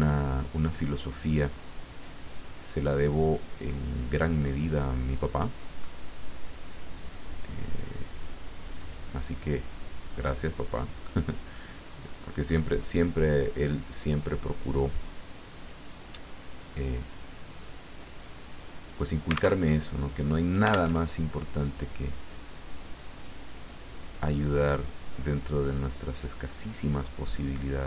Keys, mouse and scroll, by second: 1.5-5.0 drag, 5.9-6.2 scroll up 1, 7.2-9.5 drag, 10.8 click, 18.8 click, 19.6 alt+Tab, 20.9 alt+Tab, 23.1 click, 24.1 click, 25.1 click, 26.0 click.